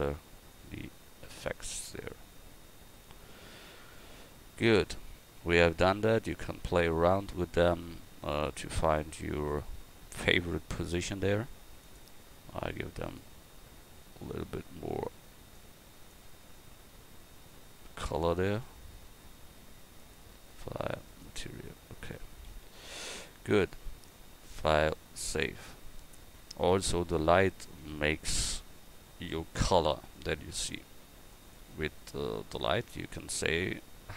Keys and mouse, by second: 10.5-13.5 drag, 22.5 a, 27.1-29.6 drag, 29.6 KP_1.